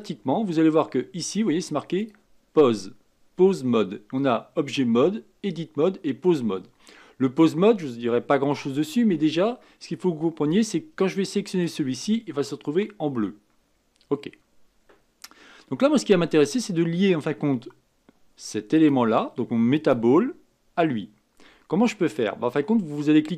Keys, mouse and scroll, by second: 2.0-5.1 drag, 11.6 click, 14.0-17.3 scroll down 2, 18.7 click, 19.7 click.